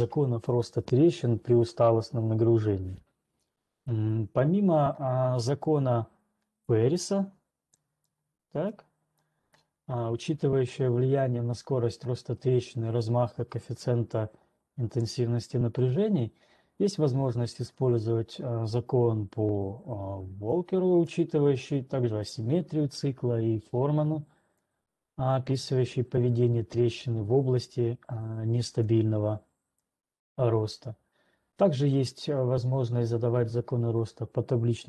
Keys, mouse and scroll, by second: 4.0-4.4 scroll, 4.4 ctrl+2, 8.5 ctrl+2, 8.5 scroll, 9.5-14.5 drag, 15.5-21.0 drag, 21.5-24.0 drag, 25.0 click.